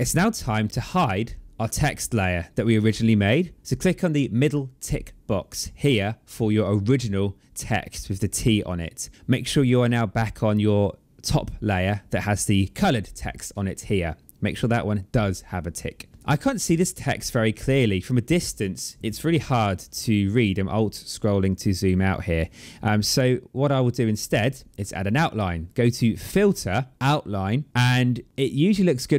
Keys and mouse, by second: 5.7 click, 9.2 click, 26.1 click, 27.6 click.